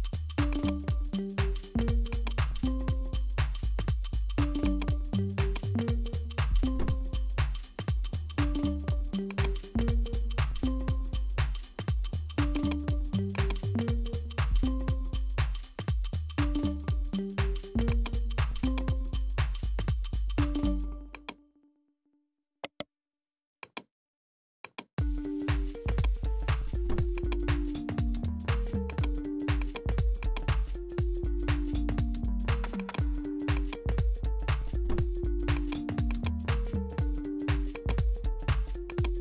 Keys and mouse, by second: 1.8-4.7 drag, 5.4 click, 7.6-9.4 drag, 12.6 click, 13.3 click, 16.9-18.0 drag, 18.6 click, 19.5-21.3 drag, 22.6 right click, 23.6-24.8 drag, 25.8-27.2 drag, 28.9 click, 29.6 click, 30.2 click, 31.1 3, 32.0 click, 33.6-34.9 drag, 34.9 ctrl+z, 35.5 click, 37.3 x, 38.9 click.